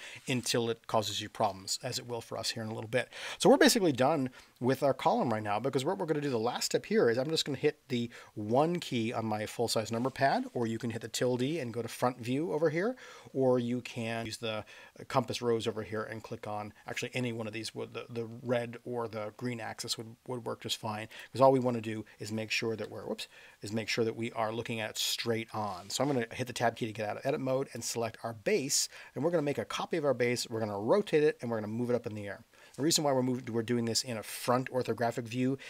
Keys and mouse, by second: 0.5 space, 8.5 KP_1, 22.8 KP_7, 23.9 KP_1, 26.3 Tab, 27.7 click.